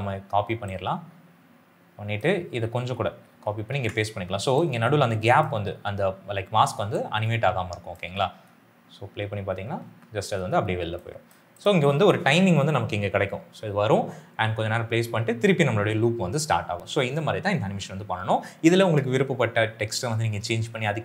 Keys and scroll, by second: 2.9 ctrl+c, 3.5 ctrl+v, 7.9 space.